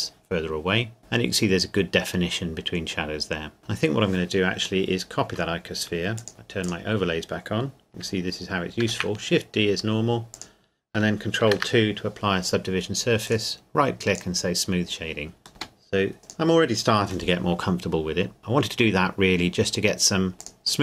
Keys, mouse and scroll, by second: 3.6 scroll down 1, 4.9 middle click, 6.2 click, 8.8 shift+d, 10.3 click, 11.5 ctrl+2, 13.4 right click, 14.2 click, 15.5 scroll down 1, 15.6 g, 16.2 click, 17.3 middle click, 18.4-19.3 scroll up 1, 20.4 click.